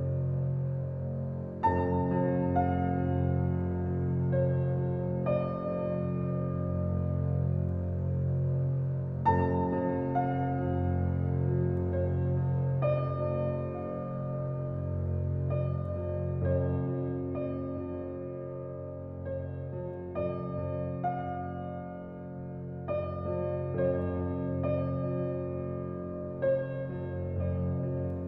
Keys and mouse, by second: 0.4 Tab, 1.0-2.7 drag, 3.2-4.0 drag, 4.6 s, 5.7 g, 9.8 click, 10.9 s, 12.4 click, 12.9 g, 15.0 click, 15.6 Tab, 15.8 click, 16.8 click, 21.0-23.6 drag, 24.2 click, 24.6 Tab, 25.8 click, 26.9 click.